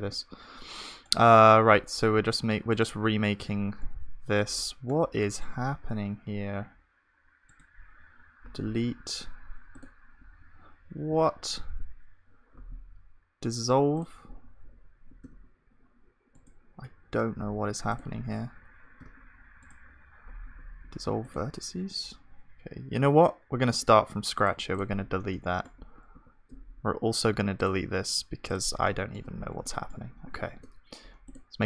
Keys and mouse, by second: 2.0 g, 5.5 g, 8.4 Delete, 11.2 ctrl+z, 12.5 Delete, 15.3 g, 17.3 Delete, 19.0 g, 20.4 Delete, 23.0 ctrl+z, 23.7 Tab, 25.3-31.3 middle drag, 26.1 shift+a, 28.8 click, 28.8-30.1 right drag, 30.5 shift+a.